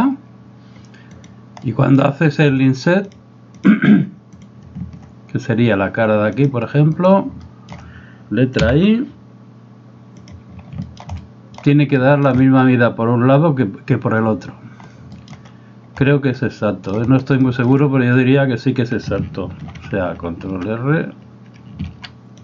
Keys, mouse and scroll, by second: 1.2 right drag, 1.7-2.0 middle drag, 3.2 click, 4.4 right click, 7.0 right click, 7.5 shift+middle click, 8.7 |, 10.9 shift+middle drag, 11.2-11.6 middle drag, 12.0 shift+middle drag, 15.2 shift+middle click, 16.4-17.0 middle drag, 17.5 shift+middle click, 19.6 ctrl+5, 19.8 ctrl+5, 20.5 ctrl+5, 21.9 ctrl+r.